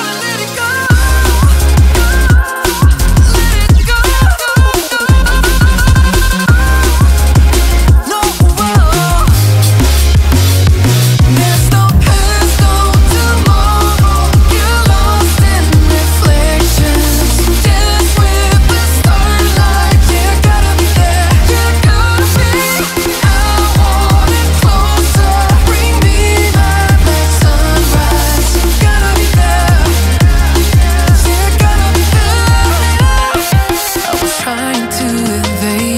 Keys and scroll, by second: 26.9 Caps_Lock.